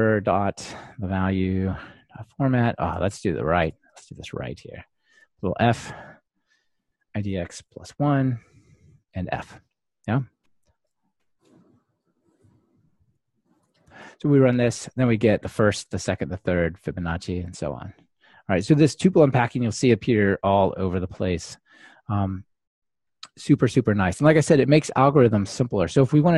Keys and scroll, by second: 11.3 Escape, 14.0 ctrl+r.